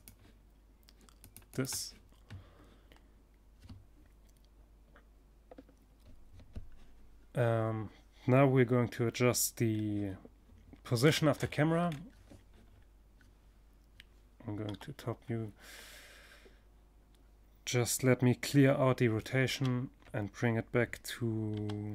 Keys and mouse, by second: 0.0-1.9 drag, 8.2 middle click, 8.9 middle click, 13.1 KP_7, 13.3 middle click, 14.2 middle click, 17.9 alt+r, 20.0 r.